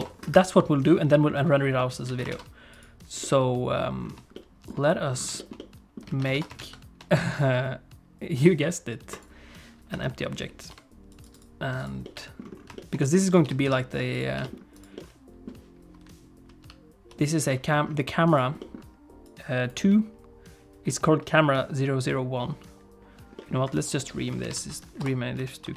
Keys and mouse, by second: 1.8 middle click, 2.1 alt+a, 2.3 ctrl+s, 3.2 middle click, 4.3 shift+middle click, 5.4 shift+middle click, 5.6 middle click, 6.1 alt+a, 6.4 ctrl+s, 9.9 KP_1, 10.8 g, 11.3 right click, 12.0 middle click, 12.8 shift+middle click, 13.0 middle click, 13.4 g, 14.4 g, 15.0 middle click, 16.0 ,, 16.7 ,, 17.5 middle click, 18.4 click, 18.6 middle click, 19.3 click, 23.4 middle click, 23.7 F2.